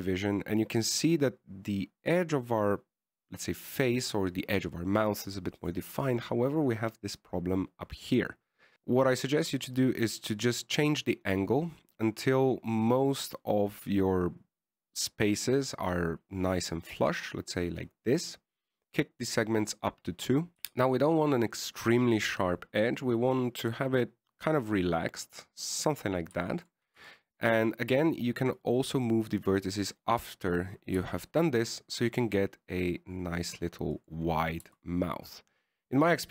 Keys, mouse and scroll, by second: 1.0 shift+middle click, 1.6-4.0 scroll up 1, 9.5 click, 20.5 click, 21.9 click, 27.8 shift+middle click, 28.3 Tab, 28.7 right click, 29.9 click, 30.3 click, 31.0 right click, 32.3 g, 35.7 right click, 35.8 g.